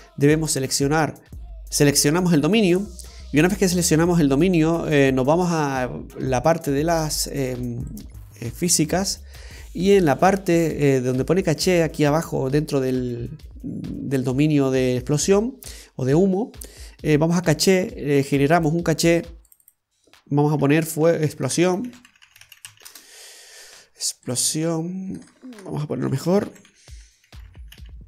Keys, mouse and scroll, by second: 1.2-1.8 scroll up 8, 6.9 click, 7.9 click, 9.0-10.9 scroll down 6, 10.9-14.3 scroll down 3, 18.6 click, 19.5 click, 19.7 click, 24.3 click, 24.4 click, 25.3 BackSpace, 25.4 BackSpace.